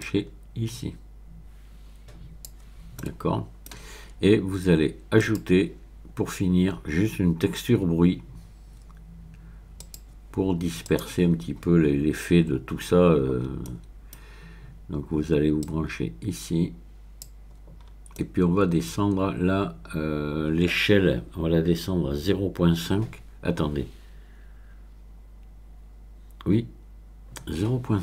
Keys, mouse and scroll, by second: 0.0-2.9 drag, 3.0-9.8 middle drag, 5.2 click, 9.8 click, 10.8 click, 13.4-14.3 scroll up 4, 15.6-17.6 drag, 17.8-18.6 scroll up 2, 18.6 middle click, 19.2-20.1 scroll up 2.